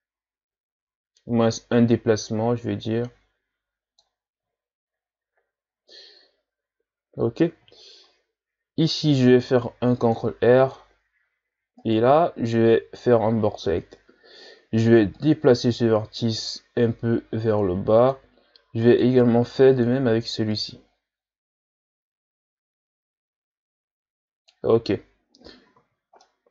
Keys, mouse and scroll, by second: 4.8-5.9 shift+scroll down 2, 7.8-8.6 shift+scroll down 1, 9.4 ctrl+r, 11.8 right click, 12.1 b, 15.1-18.3 drag, 18.8 right click, 19.1 b, 20.5-23.6 drag, 25.8 z, 26.2-26.5 middle drag.